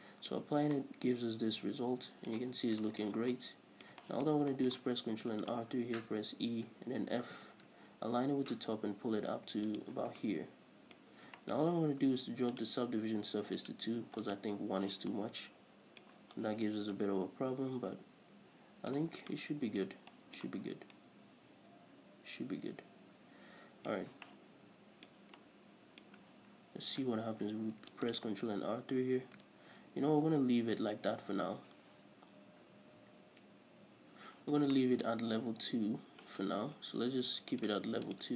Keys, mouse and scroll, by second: 0.0 right click, 0.4 middle click, 0.8-1.1 scroll up 1, 1.1-1.6 middle drag, 2.9 Tab, 3.1-5.2 shift+middle drag, 3.6 scroll down 1, 5.5 ctrl+r, 10.2 shift+click, 10.3 scroll down 1, 10.6 Tab, 11.3-12.9 middle drag, 11.4-11.8 scroll up 2, 12.9 click, 14.0 click, 14.6 click, 15.5-17.3 scroll up 1, 17.3-28.6 middle drag, 19.5 scroll down 2, 20.2 scroll up 2, 20.9 Tab, 24.4 scroll up 2, 26.9 scroll up 1, 27.7 ctrl+r, 28.6 right drag, 28.8 Tab, 31.9 ctrl+z, 36.1-38.0 middle drag, 38.0 click.